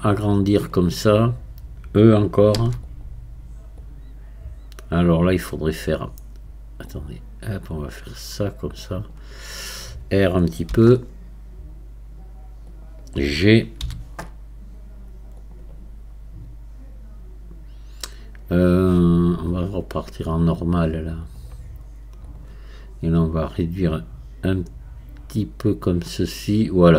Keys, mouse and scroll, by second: 2.6 e, 3.8-6.8 drag, 6.9-9.9 drag, 10.7 r, 21.3-26.9 drag.